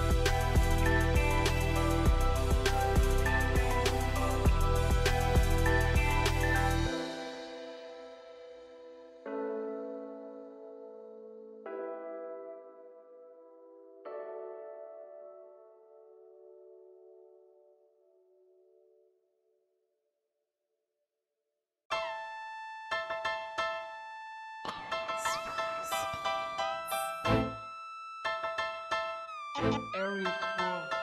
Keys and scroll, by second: 0.0 p, 2.5 l, 5.3 Escape, 5.8 x, 15.9 ctrl+v, 15.9 -, 16.7 Return, 26.2-28.0 typing.